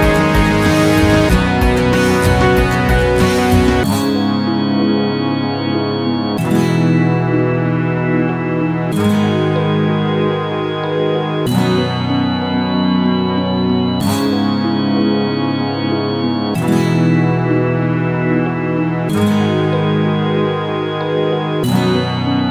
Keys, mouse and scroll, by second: 3.0 alt+middle click, 3.1 alt+click, 3.3 alt+right click, 3.5-7.7 drag, 7.7 alt+right click, 7.9 alt+middle click, 8.1-9.3 alt+drag, 9.3 alt+right click, 9.5 alt+middle click, 9.8 alt+click, 10.0 alt+right click, 10.0 alt+middle click, 10.5 shift+c, 10.7 alt+click, 10.8 f, 11.0-12.3 alt+shift+drag, 12.3 ctrl+z, 13.9 click, 14.8 alt+right click, 15.1 ctrl+click, 16.0 alt+right click, 16.1 alt+click, 16.8 ctrl+z, 16.9 f, 17.0-22.3 ctrl+drag, 22.3 alt+right click.